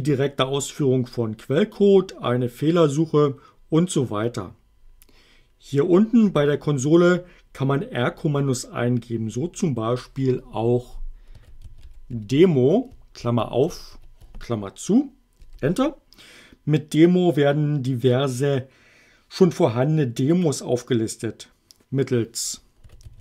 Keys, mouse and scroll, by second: 11.1-13.9 typing, 15.4 Return, 22.6-23.2 typing.